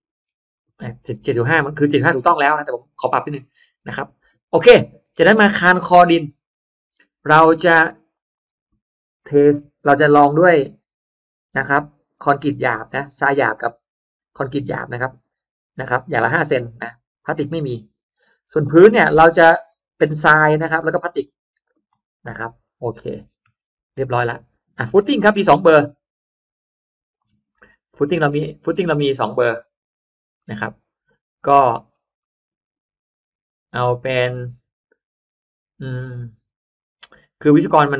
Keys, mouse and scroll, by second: 0.5 click, 1.9-2.5 scroll down 2, 3.1-3.4 scroll down 1, 3.7 scroll up 1, 5.1-5.4 scroll down 1, 5.9-6.3 scroll down 1, 6.5 middle click, 7.1 middle click, 8.1 click, 11.0 Delete, 13.1 click, 14.1 click, 17.1 click, 17.5 Delete, 18.1 middle click, 18.5 middle click, 19.6 click, 20.1 Delete, 20.7 click, 21.1 Delete, 21.6 click, 22.4-23.0 scroll down 1, 23.2-23.9 scroll up 1, 24.7 click, 26.3 click, 27.3-27.7 scroll up 1, 27.5-28.7 middle drag, 28.8 scroll down 1, 29.1 middle click, 29.9-30.3 scroll down 1, 30.3-31.7 middle drag, 32.1-37.4 middle drag, 37.7-37.9 scroll up 1.